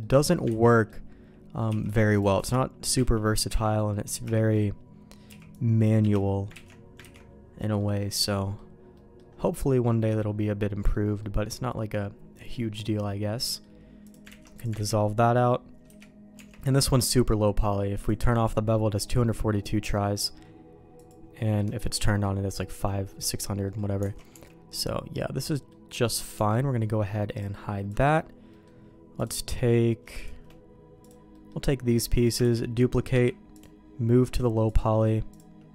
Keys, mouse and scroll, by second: 0.6 ctrl+x, 0.6 middle click, 2.9 c, 3.1 ctrl+q, 3.5 ctrl+x, 3.9 middle click, 4.3 shift+middle click, 5.3 c, 6.7 ctrl+q, 7.0 ctrl+x, 7.6 middle click, 8.2 middle click, 9.0 middle click, 9.9 middle click, 10.6 middle click, 11.2-12.7 middle drag, 13.0 middle click, 14.0 click, 14.3 ctrl+x, 14.6 click, 14.9 ctrl+x, 15.0 middle click, 15.9 a, 16.4 Tab, 16.7 middle click, 18.0 click, 21.0 click, 21.4 middle click, 22.7 middle click, 23.7 middle click, 24.1 alt+a, 24.3 Tab, 24.8 middle click, 26.1 middle click, 26.4 Tab, 27.3 click, 28.5 middle click, 29.2 click, 30.2 shift+click, 31.0 click, 31.3 middle click, 32.5 shift+d, 33.1 m, 34.7 click, 35.3 click.